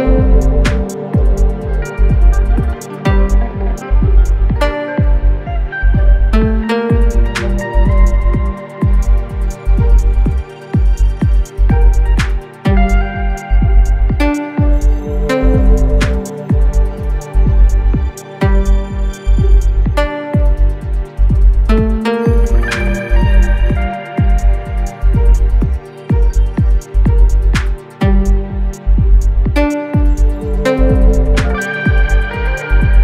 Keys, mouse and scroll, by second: 4.9-9.0 drag, 11.6 click, 13.7 click, 13.7 typing, 18.0 click, 18.0 typing, 20.3 click, 23.6 click, 23.6 typing, 26.1-33.0 drag, 28.8 typing.